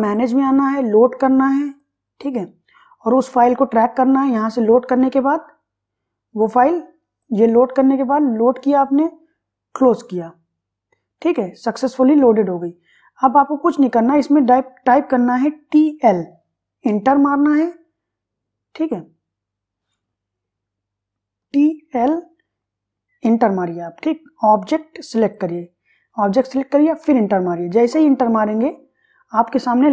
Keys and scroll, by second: 15.6 t, 16.0 l, 16.9 Return, 20.5 Escape, 21.5 t, 22.2 l, 23.3 Return, 27.1 Return.